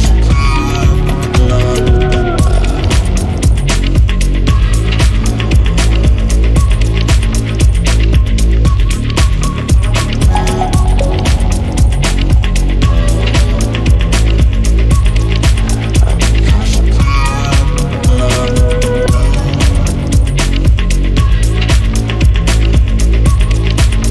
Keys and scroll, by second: 6.2-10.3 typing, 19.3 Escape.